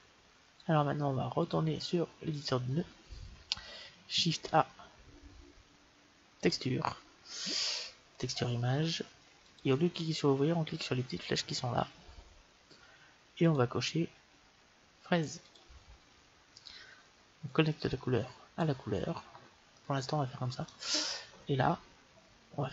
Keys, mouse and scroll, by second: 1.2-3.0 drag, 3.1 click, 4.3 shift+a, 11.3-12.5 middle drag, 13.4-15.1 drag, 17.3-19.4 drag, 19.2-21.4 middle drag.